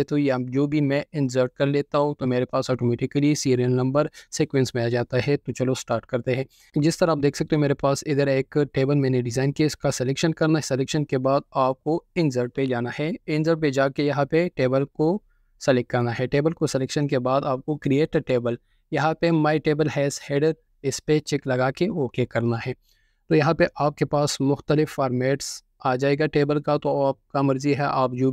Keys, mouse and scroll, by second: 1.6 ctrl+z, 2.1 ctrl+z, 2.9 ctrl+z, 3.4 ctrl+z, 12.6 ctrl+click, 25.9 ctrl+4.